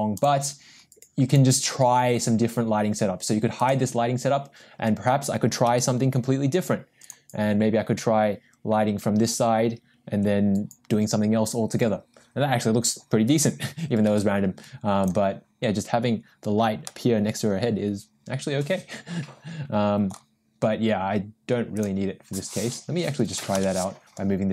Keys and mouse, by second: 3.6 click, 5.7 g, 14.1 g, 17.0-20.3 middle drag, 23.5 m.